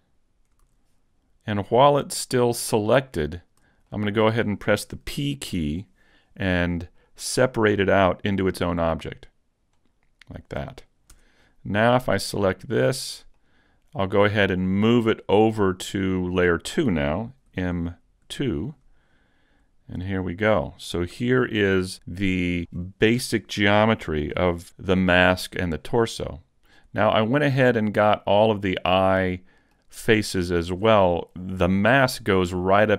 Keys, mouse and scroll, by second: 0.7 super+z, 1.0 scroll down 1, 1.5 middle click, 3.2 shift+middle click, 3.9 middle click, 5.7 p, 11.2 Tab, 12.9 right click, 13.4 middle click, 15.2-16.0 scroll down 1, 17.5 m, 20.1 click, 20.7 middle click, 21.1 a, 21.5 middle click, 23.4 scroll up 1, 27.8-28.4 scroll up 2, 28.2 shift+middle click, 28.9-29.6 scroll up 1, 30.2 middle click.